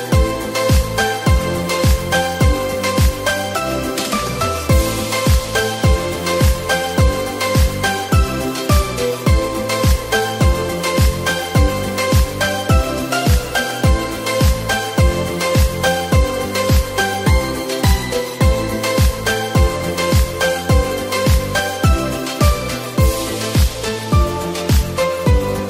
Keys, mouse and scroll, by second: 2.5 click, 4.2-7.0 drag, 6.2-6.9 scroll down 10, 7.5-8.5 scroll up 7, 10.3-13.9 drag.